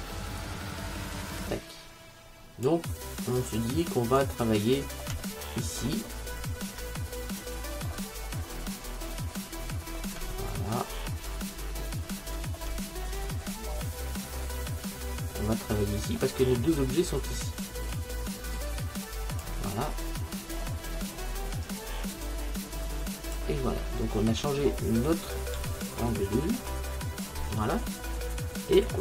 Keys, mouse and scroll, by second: 0.5 click, 3.5 click, 4.8 middle click, 5.3-9.0 middle drag, 9.2-13.0 middle drag, 13.6-17.2 middle drag, 18.0 click, 19.8-22.0 middle drag, 22.7-24.0 drag, 24.0 alt+shift+q, 25.3-29.0 middle drag.